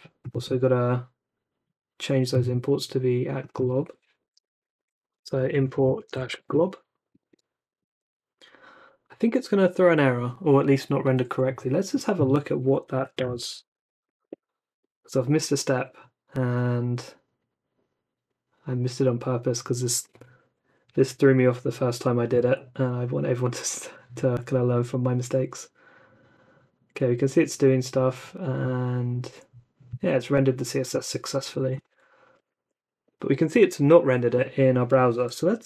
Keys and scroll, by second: 4.2 ctrl+n, 4.9-7.0 typing, 7.1 Escape, 7.8 super+s, 12.7-14.7 typing, 32.3 super+r.